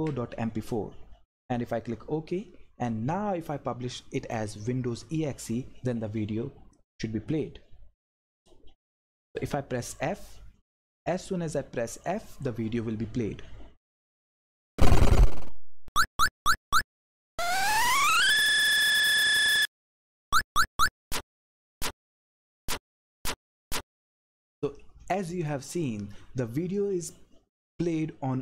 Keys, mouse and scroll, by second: 0.5 Right, 1.3 click, 6.8 click, 13.9 f, 16.5 Left, 17.1 Up, 18.3 Down, 18.9 Left, 21.2 Up, 22.0 Down, 22.5 Right, 23.1 Up.